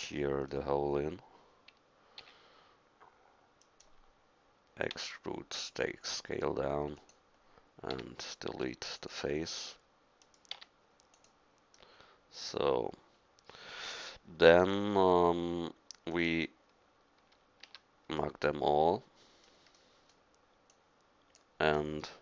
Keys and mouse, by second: 0.3 middle click, 2.2 e, 4.9 s, 7.9 x, 10.5 x, 17.6 a, 20.7 click.